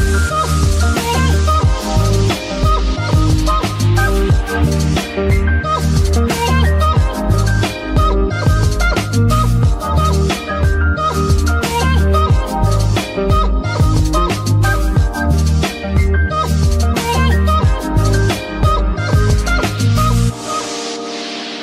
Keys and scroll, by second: 4.1 g, 5.2 Escape, 9.7 KP_3, 11.7 shift+g, 12.6 Escape, 12.8 z, 13.3 g, 15.0 Escape, 15.5 z, 18.0 z, 19.6 c.